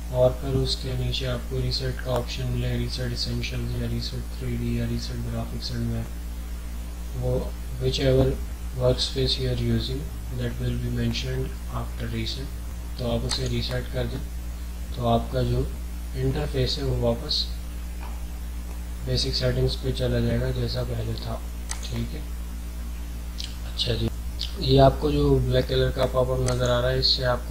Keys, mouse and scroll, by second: 13.2 click, 21.7 click, 24.1 click, 26.4 click.